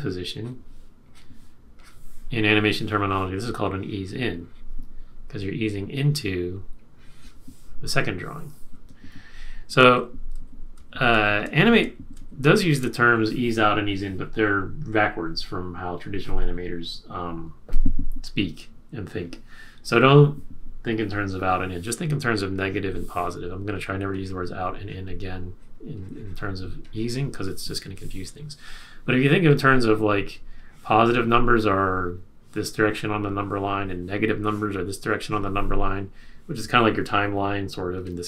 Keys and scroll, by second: 9.1 super+z, 9.9 super+z, 10.5 super+z, 11.1 super+z, 11.8 super+z.